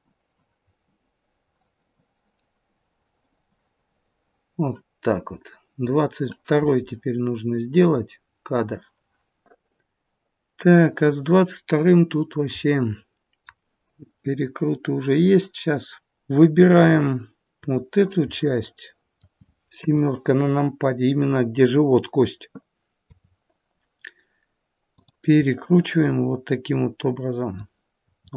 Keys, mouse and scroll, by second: 7.2-7.9 scroll down 1, 8.0-9.5 scroll down 1, 9.5 click, 9.5 middle click, 10.5 middle click, 12.1-12.7 scroll up 1, 12.7 middle click, 17.5 click, 18.3 middle click, 19.9 KP_7, 23.1 r, 25.4 middle click, 28.0 r.